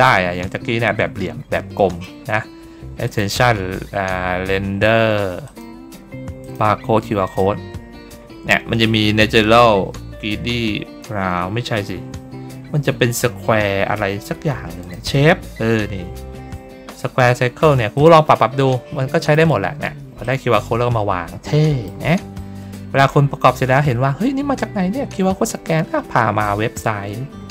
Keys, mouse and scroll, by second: 0.3 ctrl+middle click, 0.8 ctrl+middle click, 1.6 middle click, 2.9 click, 5.3 click, 6.3 click, 7.1 click, 14.7 click, 17.8 click, 19.1 click, 20.1-21.7 drag, 22.2 ctrl+middle click, 22.2 ctrl+scroll down 1, 22.6 middle click, 23.1 ctrl+middle click, 24.6 ctrl+middle click, 26.3 middle click, 27.0 ctrl+middle click.